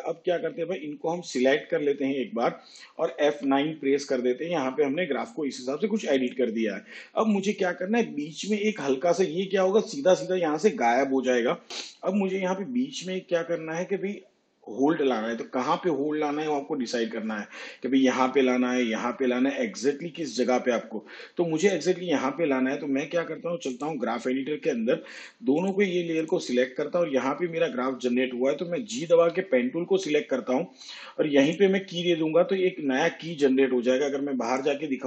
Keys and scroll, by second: 4.4 F9, 30.3 g.